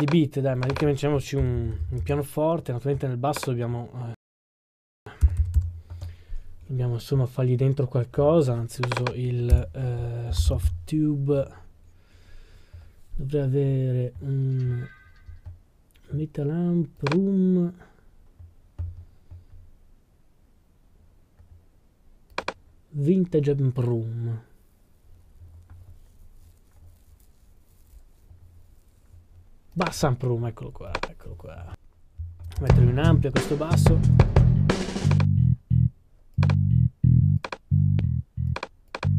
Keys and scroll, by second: 1.1-3.3 typing, 5.0-6.6 typing, 10.3 typing, 11.7-12.4 typing.